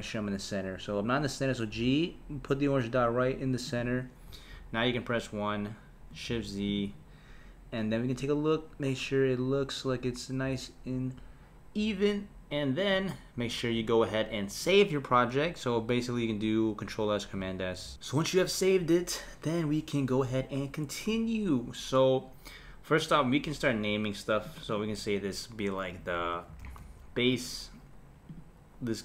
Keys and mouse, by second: 1.7 g, 4.3 KP_1, 6.3 shift+z, 6.7 click, 22.9-24.6 drag, 24.7-27.7 drag, 28.3 click.